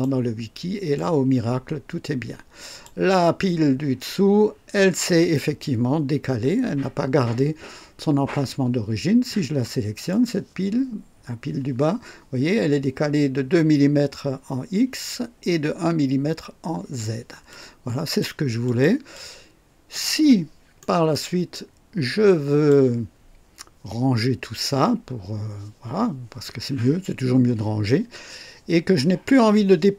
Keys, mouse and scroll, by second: 0.0 click, 0.9-3.0 drag, 10.1 click, 17.5 click, 18.6 click, 19.1-20.1 drag, 20.8 right click, 21.5-22.9 drag.